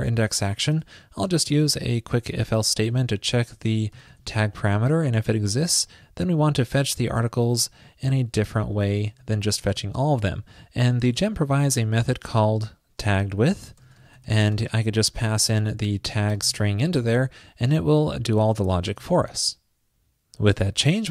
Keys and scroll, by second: 3.1 ctrl+p, 6.4 alt+Left, 6.4 alt+Left, 7.3 shift+super+Right, 9.4 super+v, 15.5 ctrl+p, 19.1 super+s.